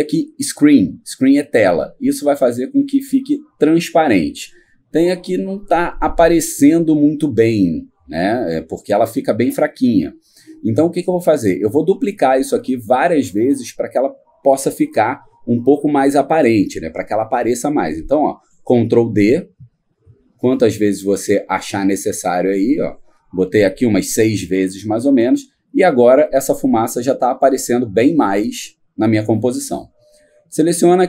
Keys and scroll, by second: 19.3 ctrl+d, 20.2 ctrl+d, 20.7 ctrl+d, 22.9 ctrl+d.